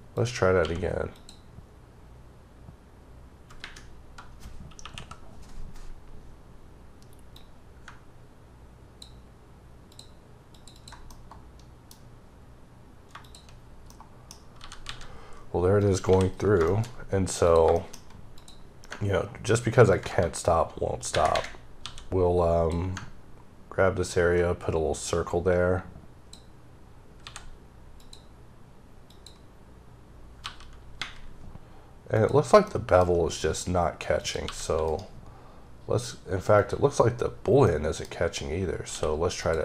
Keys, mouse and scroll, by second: 0.1 click, 0.5 q, 1.0 click, 1.9-2.4 scroll down 1, 2.6-3.5 scroll down 4, 4.7 KP_1, 5.5-7.2 scroll up 2, 7.2 click, 10.4 double click, 10.6 click, 11.0 middle click, 13.1 shift+click, 13.5-13.8 scroll down 3, 13.8 middle click, 14.5 g, 15.7 click, 16.0 h, 16.5 shift+middle click, 16.8-17.3 scroll up 1, 17.3 click, 17.6 shift+middle click, 17.8-18.2 scroll up 1, 18.2 click, 21.0 ⊘, 21.2 ⊘, 21.7 d, 24.0 click, 27.1 x, 27.9 click, 29.0 click, 30.3 g, 32.0 click, 32.5 middle click, 32.6-33.2 scroll up 3, 33.3 middle click, 34.1 click, 34.3 g, 34.8 right click, 36.5 click, 36.9-37.5 scroll down 4, 37.5 middle click, 38.0 scroll up 2, 38.8 q, 39.3 click.